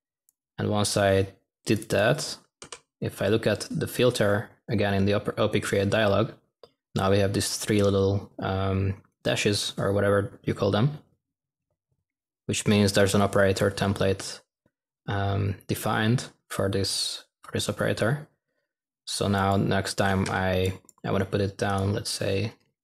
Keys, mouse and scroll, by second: 0.0-0.5 typing, 2.6 f.